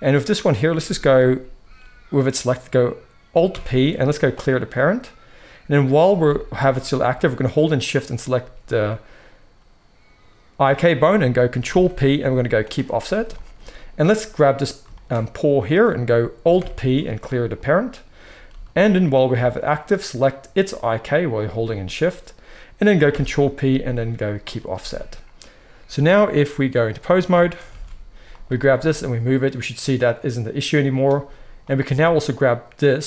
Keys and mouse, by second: 3.4 alt+p, 6.1 g, 11.4-14.2 ctrl+middle drag, 11.6 ctrl+p, 14.2 click, 14.7-20.7 shift+middle drag, 16.5 alt+p, 18.4 g, 20.7 shift+click, 20.8-26.2 shift+middle drag, 23.0 ctrl+p, 26.2-28.3 drag, 27.6 alt+a, 28.3-31.5 middle drag, 28.6 g, 31.5 click, 31.7-33.0 middle drag, 31.7 g.